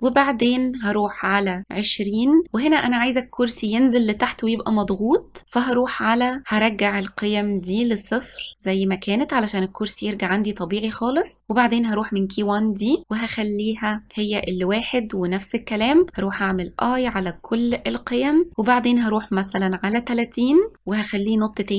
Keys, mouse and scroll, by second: 0.3-1.6 drag, 6.6-11.2 drag, 11.4-14.1 drag, 15.9 i, 16.2 i, 17.1 i, 18.5-20.7 drag, 21.6-21.7 drag.